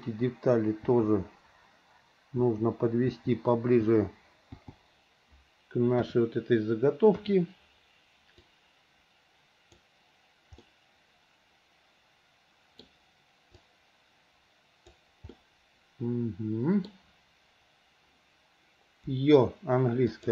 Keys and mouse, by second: 0.0 l, 1.1 l, 2.6 l, 3.3 l, 4.0 l, 4.7 l, 6.1 KP_1, 7.3 KP_3, 8.7-9.9 drag, 10.8-13.1 middle drag, 13.7 click, 15.6-17.1 middle drag.